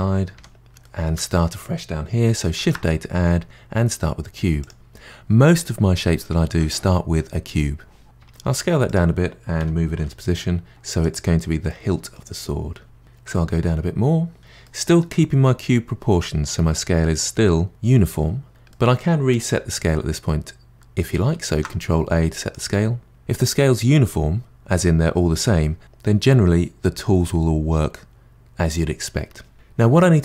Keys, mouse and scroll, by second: 0.8-2.6 middle drag, 2.6 shift+a, 8.2 s, 9.6 g, 11.7-13.2 middle drag, 13.3 s, 14.6-17.6 middle drag, 18.7-20.7 middle drag, 21.5 ctrl+a, 29.9-30.2 middle drag.